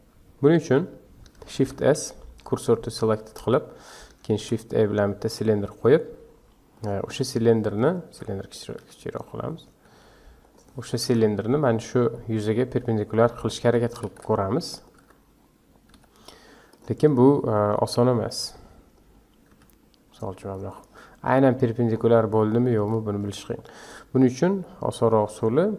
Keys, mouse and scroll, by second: 1.5 shift+s, 3.4 Tab, 3.7-4.3 scroll down 2, 4.3 shift+a, 7.2-8.1 scroll down 13, 8.1 Tab, 8.8 s, 9.9 s, 11.0 KP_Decimal, 11.8 scroll down 8, 12.1-13.6 middle drag, 13.6 s, 15.0 Tab, 15.9 r, 17.0-19.5 middle drag, 19.5 g, 20.8-22.1 middle drag, 22.1 scroll down 5, 22.4-22.8 middle drag, 22.8 scroll up 4, 23.4-23.8 middle drag, 23.8 click, 24.6-25.7 middle drag.